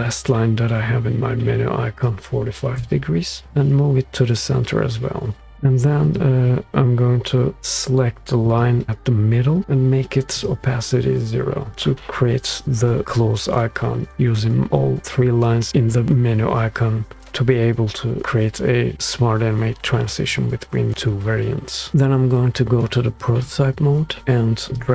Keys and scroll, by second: 11.7 Return, 11.7 0.